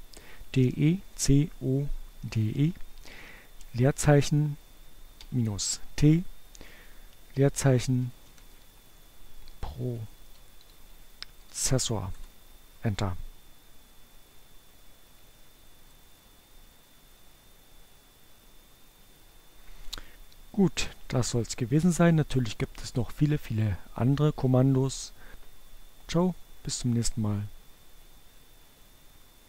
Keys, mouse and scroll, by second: 2.2 space, 3.6 -, 4.1 t, 6.1-10.8 typing, 14.7-19.1 drag, 28.3 click.